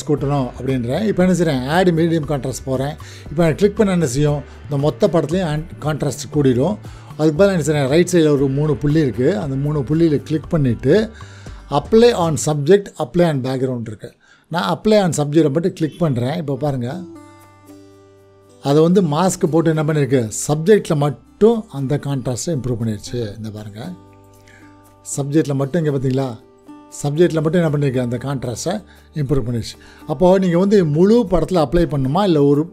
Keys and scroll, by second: 22.1 ctrl+=, 24.1 space, 30.5 ctrl+0, 30.7 -.